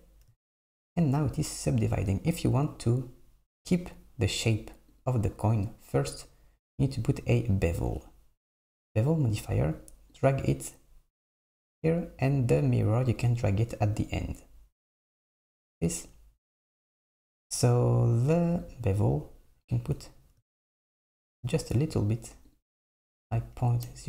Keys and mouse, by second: 5.0 click, 8.0-9.2 drag, 10.2-11.4 drag, 13.2-14.4 drag, 18.7-20.5 drag, 22.1 click, 23.2 BackSpace, 23.3 BackSpace.